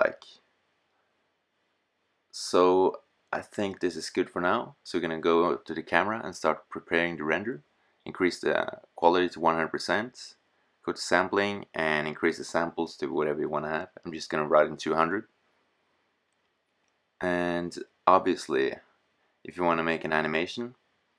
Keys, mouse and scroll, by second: 5.2-13.2 drag, 13.2 KP_0, 21.1 click.